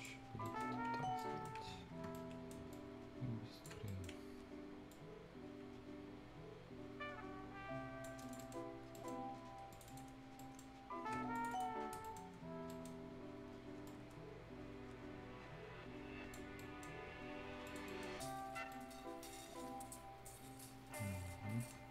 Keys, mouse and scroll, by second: 0.2 scroll down 1, 0.4 right click, 2.1 right click, 2.7 ctrl+click, 3.8 right click, 4.2-4.9 scroll up 1, 4.9-8.2 drag, 8.3 right click, 8.7 scroll up 1, 8.9 right click, 9.7 click, 10.1 scroll down 1, 10.3 right click, 10.7 scroll up 1, 11.3 shift+click, 12.0 shift+right click, 12.3 scroll up 1, 12.6 right click, 13.8 click, 16.5 right click, 16.9 scroll down 1, 17.1 Tab, 17.6 click, 17.8 right click, 18.0 scroll down 1, 18.5 scroll up 1, 18.7-21.7 right drag, 21.7 scroll down 1.